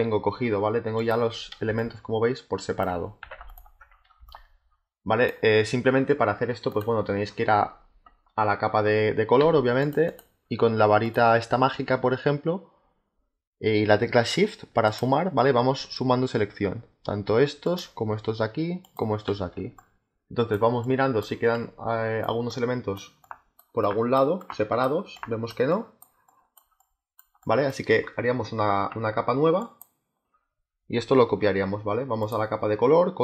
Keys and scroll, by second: 1.6 space, 3.1 z, 4.1 space, 9.3 z, 19.4 space.